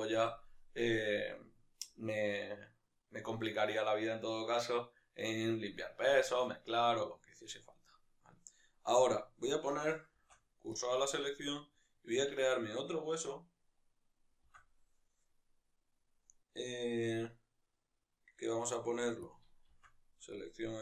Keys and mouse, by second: 7.8-8.4 right drag, 8.4-10.8 middle drag, 10.8 shift+s, 11.8 right click, 12.4 Tab, 12.6 right click, 14.4 shift+d, 19.3 click, 20.5 shift+s.